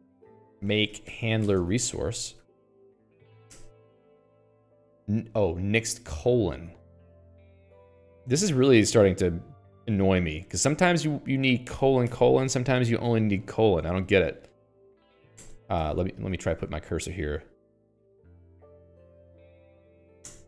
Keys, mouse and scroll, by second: 0.1 Return, 0.6-3.7 typing, 3.9 Return, 7.3 click, 7.9 Escape, 8.1-12.5 typing, 13.1 ctrl+s, 13.5 Escape, 13.6 Escape, 13.7 k, 14.0 k, 15.1 alt+x, 15.8 Return, 16.2 Escape, 16.7 j, 17.8 k, 18.2-19.3 l, 19.7 n, 20.1 alt+x.